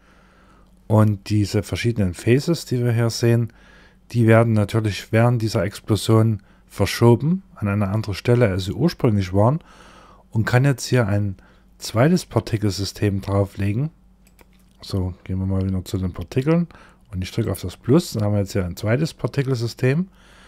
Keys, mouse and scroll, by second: 1.0 click, 1.8 middle click, 13.7 click, 14.6-16.5 scroll up 24, 16.9 click.